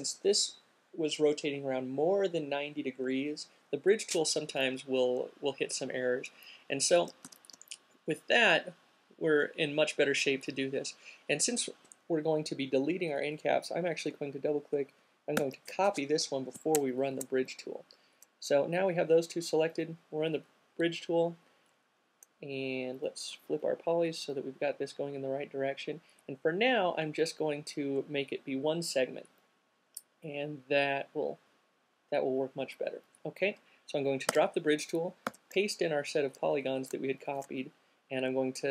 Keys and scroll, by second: 6.8 alt+q, 14.3 alt+super+c, 17.0 alt+shift+super+c, 34.5 q, 34.8 alt+super+v, 37.1 alt+shift+super+v.